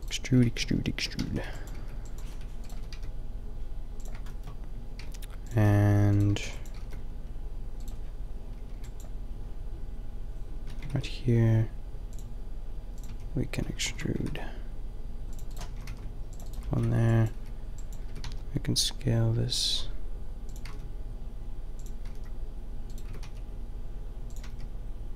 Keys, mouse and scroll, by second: 0.6 ctrl+z, 0.7 ctrl+z, 1.2-2.7 typing, 4.9-6.7 typing, 8.7 b, 10.7 a, 10.9 ctrl+r, 13.0 click, 13.1 a, 13.6 ctrl+z, 14.0 ctrl+z, 14.2 ctrl+r, 15.2 click, 15.7-18.0 typing, 15.9 ctrl+r, 20.5 click, 20.6 g, 22.0 g, 23.1 s, 24.3 g.